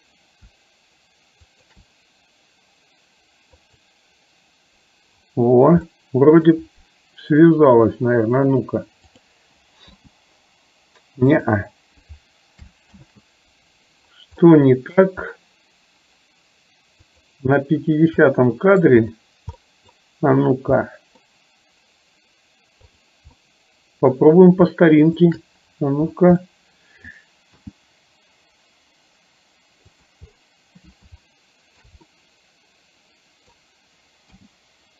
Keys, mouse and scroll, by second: 1.6 shift+click, 3.6 click, 6.0 middle click, 9.1 click, 10.0 g, 13.0 ctrl+z, 14.5 middle click, 17.3 click, 18.3 middle click, 19.6 middle click, 20.9 middle click, 23.0 click, 23.4 middle click, 25.3 shift+click, 26.5 middle click, 27.6 g, 31.3 shift+middle click, 32.1-33.6 middle drag, 34.4 g.